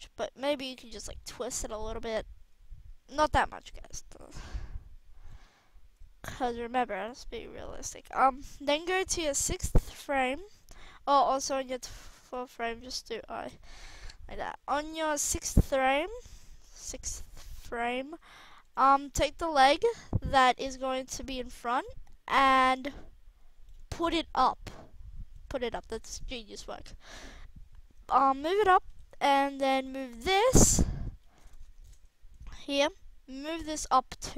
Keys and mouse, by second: 4.2 click, 5.9-6.9 drag, 7.7-8.8 middle drag, 8.8-10.2 drag, 12.1 a, 12.4 a, 13.0 i, 14.8 middle drag, 16.5 click, 17.0-17.3 drag, 17.4 click, 17.5-21.0 middle drag, 21.0-22.8 drag, 24.4-25.3 drag, 25.3-26.2 middle drag, 26.2 click, 26.5-27.0 middle drag, 27.1 middle drag, 28.9 KP_3.